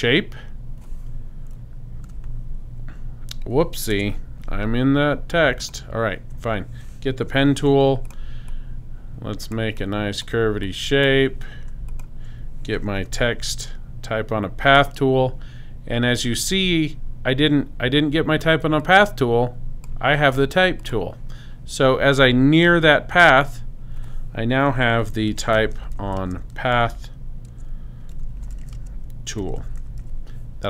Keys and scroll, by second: 2.1 p, 3.9 BackSpace, 7.2 super+p, 13.0 super+t, 24.8-30.5 typing.